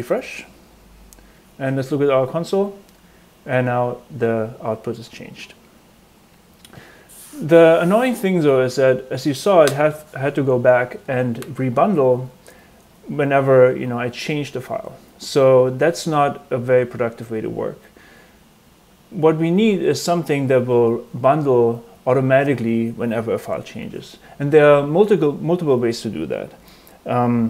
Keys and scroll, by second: 8.5 super+Tab.